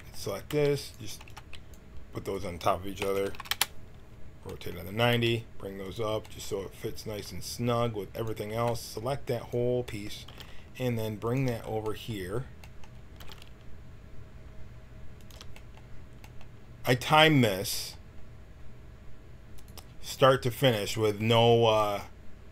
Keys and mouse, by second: 0.4 g, 1.2 b, 2.2 right click, 2.9 r, 5.1 g, 7.0 g, 8.5 b, 10.2 g, 13.2 g, 19.5-22.5 drag.